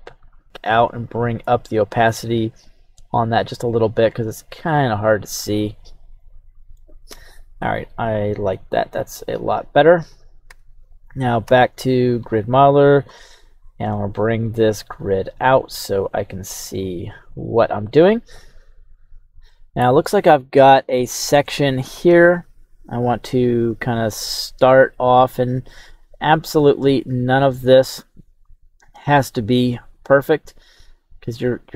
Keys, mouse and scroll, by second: 0.6-4.7 drag, 6.2 middle click, 7.1 KP_3, 7.7-9.2 scroll up 2, 10.1 right click, 10.4 Tab, 10.8 right click, 11.4 q, 12.9 scroll up 1, 14.5-15.6 scroll down 2, 15.6-15.9 scroll down 1, 20.3-23.5 scroll up 2.